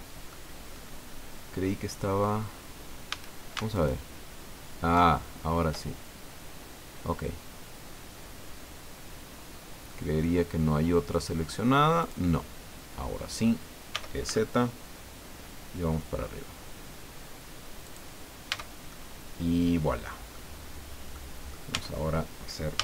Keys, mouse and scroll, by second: 0.7-1.0 scroll up 2, 2.4 scroll down 2, 3.1 a, 3.7 alt+shift+right click, 5.2-6.5 scroll down 6, 8.1-10.4 drag, 11.1 click, 12.0-13.6 drag, 12.3 middle click, 13.9 e, 14.3 z, 17.8 click, 18.2 scroll down 1, 18.5 Tab, 18.9-20.5 drag, 20.5 scroll down 1, 21.1 click, 21.7 Tab, 22.7 a.